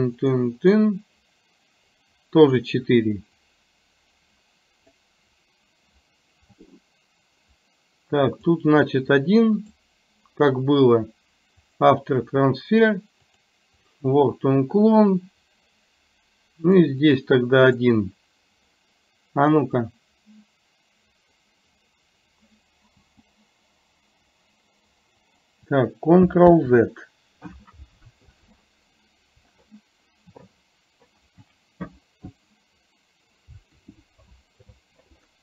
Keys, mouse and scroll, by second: 0.3 click, 0.7 click, 2.0 click, 3.7-5.0 drag, 8.4 click, 8.8 click, 9.8 click, 13.4 click, 16.7 click, 17.2 click, 17.7 click, 20.2-21.5 drag, 26.8 ctrl+z.